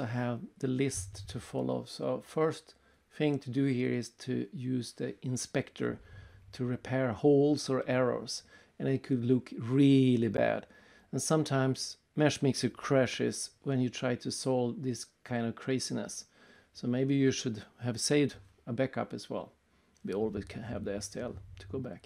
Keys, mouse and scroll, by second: 0.8 right click, 3.6-4.0 scroll down 3, 4.1 middle click, 4.5 right click, 6.5 click, 8.7 click, 10.8 right click, 13.4 click, 15.5 click, 16.8 click, 18.9 click, 21.6 click.